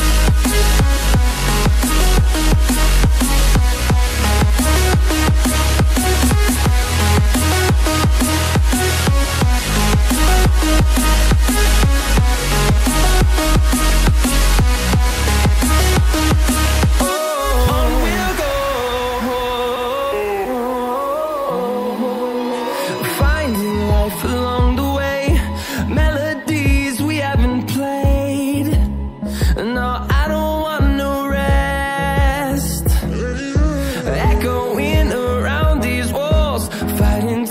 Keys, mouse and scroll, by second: 0.4 click, 2.9 double click, 4.6 click, 5.5 double click, 6.2 scroll up 1, 7.2 click, 9.9 scroll down 1, 10.6 scroll up 1, 11.4 click, 11.6 double click, 13.0 click, 14.3 ctrl+z, 15.3 click, 20.7-21.2 scroll down 1, 21.4-22.3 scroll up 1, 22.3 scroll down 1, 23.5 click, 24.7-25.3 scroll up 1, 25.3 scroll down 1, 25.7-26.5 scroll up 1, 27.0 click, 27.7 double click, 28.7-29.1 scroll down 1, 30.0 click, 30.6-31.1 scroll down 1, 31.1 scroll up 1, 32.1 click, 33.8 right click, 35.1 click, 37.1 ctrl+c.